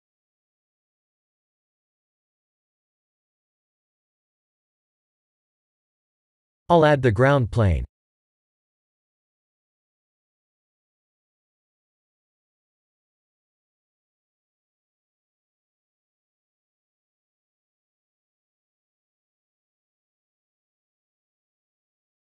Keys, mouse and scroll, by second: 11.3 click, 11.5 shift+a, 14.1 s, 15.4 s, 16.7 KP_3, 17.7-18.7 scroll up 10, 19.0 g.